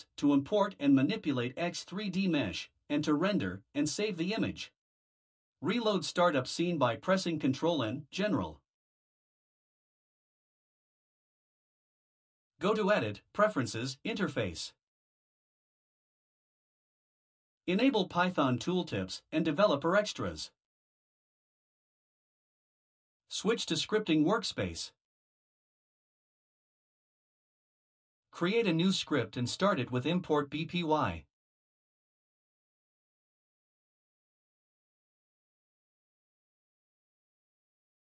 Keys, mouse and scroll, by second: 5.4 ctrl+n, 29.2 click, 31.7 click, 34.4-38.2 typing.